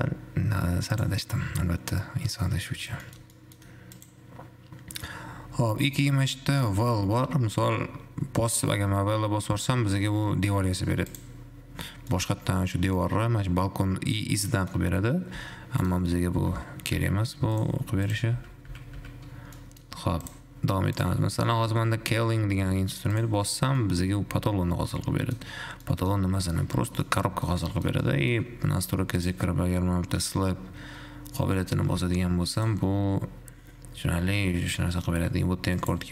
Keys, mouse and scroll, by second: 1.2 click, 3.4-4.4 shift+middle drag, 4.4 click, 11.4-12.4 drag, 12.4-15.4 middle drag, 16.9 ctrl+z, 17.4 ctrl+z, 17.9 click, 18.4 click, 18.6 ctrl+z, 18.9 ctrl+z, 19.4 ctrl+z, 19.9-20.4 middle drag, 20.4 click, 21.4 click, 23.4-24.0 drag, 24.0-25.9 middle drag, 25.9 scroll up 3, 26.0 middle click, 26.9-29.4 middle drag, 29.4 click, 32.9 click, 36.0 click.